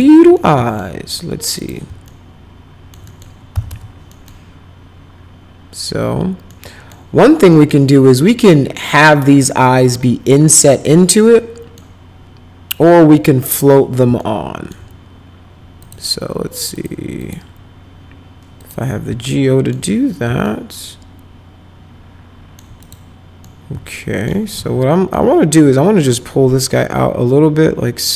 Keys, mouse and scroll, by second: 0.3 alt+middle click, 1.5 click, 2.0 alt+middle click, 3.0 middle click, 3.3-4.1 typing, 4.1 middle click, 6.5 middle click, 7.5 middle click, 11.1 middle click, 14.1 alt+middle click, 15.8 click, 16.7 click, 17.1 click, 18.6 click, 19.3 alt+middle click, 20.4-22.5 alt+middle drag, 22.8 click, 23.4 alt+middle click, 24.5 w, 25.1 alt+middle click, 26.1-28.1 drag.